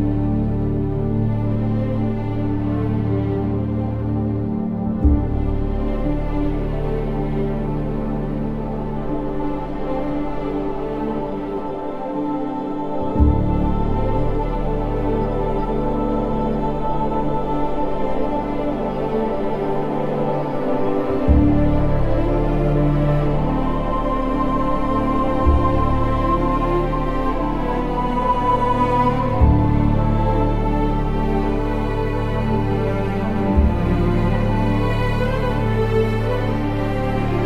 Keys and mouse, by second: 0.1 click, 1.5 ctrl+z, 2.8 Tab, 3.2 z, 14.1 Tab, 15.7-17.7 ctrl+KP_Add, 18.0 KP_3, 21.2 Tab, 26.0 click, 32.9 ctrl+z, 35.6-37.4 drag.